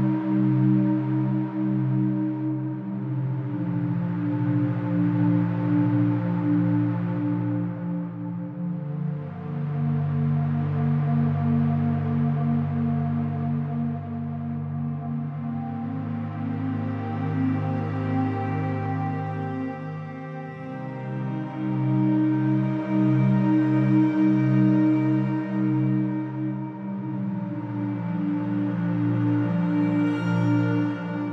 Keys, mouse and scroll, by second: 0.5 BackSpace, 2.5 click, 4.8-8.8 drag, 9.3-9.6 scroll down 7, 9.6-10.5 scroll up 2, 10.5 click, 12.6-13.2 scroll up 9, 13.2 click, 14.0-19.6 right drag, 19.6 click, 20.5 KP_1, 21.8 shift+a, 23.4 KP_0, 23.9 KP_0, 26.2-27.8 drag, 28.5-30.8 drag, 31.0-31.3 drag.